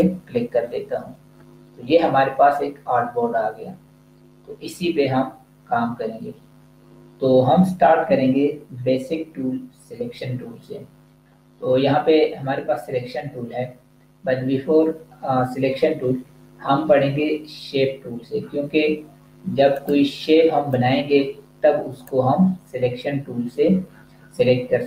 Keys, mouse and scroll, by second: 19.6 click.